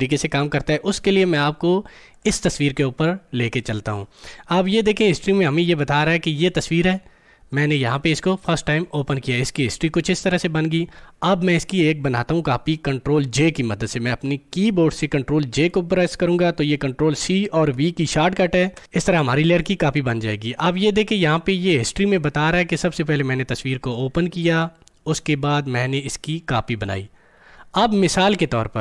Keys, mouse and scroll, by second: 2.1 click, 6.3 click, 18.7 ctrl+j.